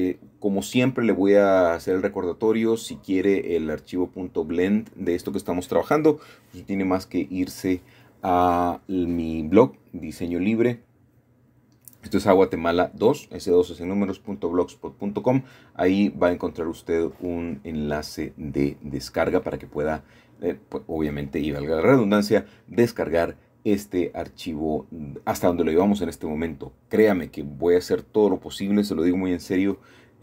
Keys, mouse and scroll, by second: 0.6-2.8 shift+drag, 2.1 middle click, 2.8 scroll down 2, 3.0-3.7 scroll up 2, 4.2 shift+click, 4.5-4.9 typing, 5.2 Escape, 8.8-9.3 typing, 11.3 shift+middle click, 12.5-14.2 typing, 15.5 shift+click, 16.3 shift+click, 17.7 shift+click, 18.1-19.6 shift+drag, 19.9-21.4 typing, 20.5 Escape, 20.7 Escape, 24.6 click, 25.5-26.7 shift+middle drag, 28.1-29.1 typing.